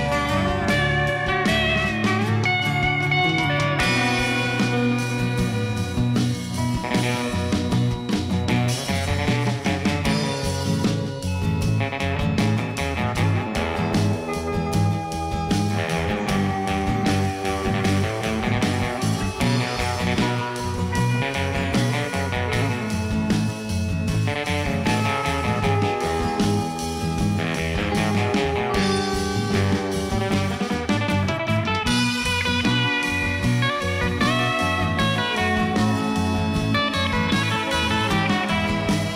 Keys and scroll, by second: 1.2 Tab, 3.8 g, 3.9 y, 5.1 shift+d, 5.2 y, 5.9 alt+a, 10.6 shift+d, 10.8 x, 11.5 7, 12.5 g, 13.9 g, 14.0 z, 15.4 Tab, 15.7 a, 16.0 s, 16.5 Tab, 16.7 g, 16.8 z, 19.7 g, 19.8 z, 20.6 g, 20.7 x, 24.2 0, 24.3 Return, 24.8 1, 24.8 Return, 25.7 -, 25.8 1, 25.9 Return, 30.0-31.5 typing, 30.1 Return, 31.6 Return, 34.5 1, 34.6 5, 34.7 Return.